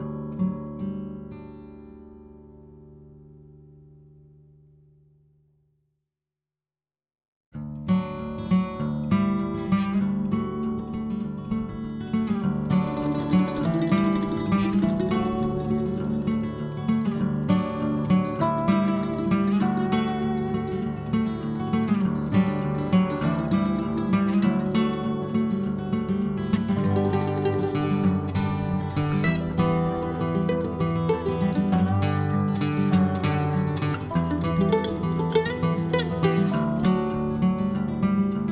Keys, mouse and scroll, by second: 1.1 middle click, 1.5-2.5 drag, 2.5-3.7 middle drag, 3.7-5.2 drag, 5.2-6.2 middle drag, 6.2-7.4 drag, 7.4 middle click, 8.2 click, 9.0 middle click, 9.8 scroll up 1, 10.3-11.9 drag, 11.9 n, 12.4 click, 12.9-14.2 middle drag, 14.2 click, 14.8 scroll down 1, 14.9-15.9 middle drag, 15.9-17.5 drag, 19.2-20.8 middle drag, 21.2 click, 21.4 click, 21.6-23.3 middle drag, 23.3 scroll up 1, 23.5 middle click, 24.1 click, 24.5 middle click, 25.5 click, 26.1 middle click, 26.3-26.8 scroll up 1, 26.8-29.3 drag, 29.3 middle click, 30.1 click, 30.9 middle click, 31.5 click, 32.0 middle click, 32.8-35.1 drag, 35.1-36.4 middle drag, 36.4-38.5 drag.